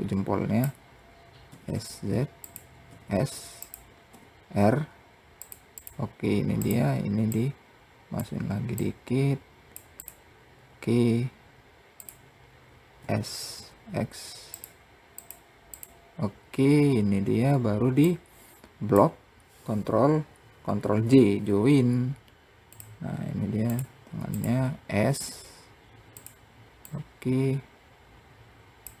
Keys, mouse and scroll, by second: 0.9 s, 2.3 s, 3.5 r, 5.2 click, 6.0 click, 6.7 click, 8.2 click, 9.4 click, 11.4 click, 12.4 s, 14.6 click, 15.1 click, 17.4 click, 20.2 ctrl+j, 22.1 click, 23.1 click, 23.7 click, 24.6 s, 26.3 click.